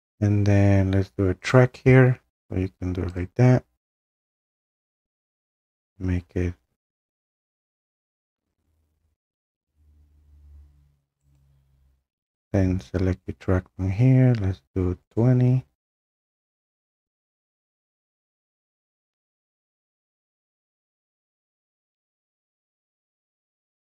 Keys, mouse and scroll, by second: 1.5 click, 3.2 click, 11.4 right click, 15.1 click, 17.8 click, 22.1 right click.